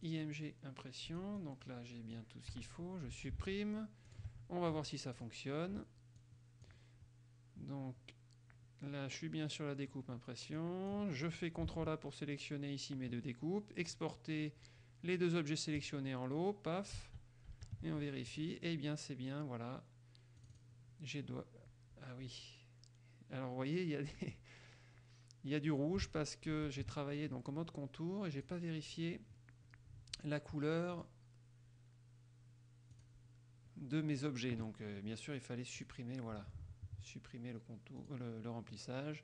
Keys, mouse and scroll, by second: 0.0 click, 1.2-2.5 drag, 2.7 Delete, 3.6 alt+Tab, 4.2 alt+click, 5.3 click, 6.4 click, 10.7 click, 11.4 click, 11.8 ctrl+a, 14.0 click, 15.9 click, 17.1 alt+Tab, 18.4 click, 20.6 click, 26.2 alt+Tab, 28.5 click, 31.2 click, 33.1 click, 36.0 click, 38.2 click.